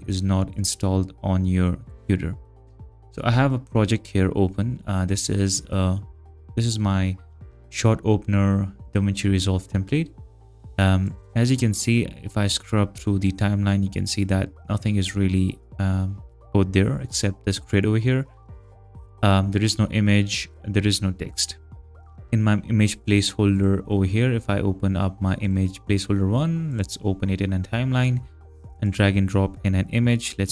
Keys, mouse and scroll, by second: 11.0 click, 17.8 click, 18.7 click, 23.1 click, 23.6 click, 25.4 right click, 26.7 click, 27.5 click, 28.8 click.